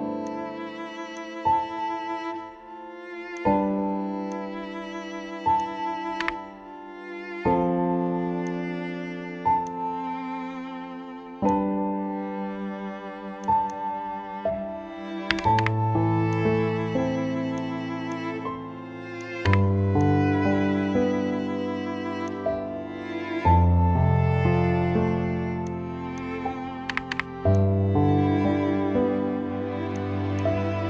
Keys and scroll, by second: 6.2 t, 15.3 KP_7, 15.5 KP_5, 19.5 KP_0, 26.9 KP_2, 27.1 KP_0.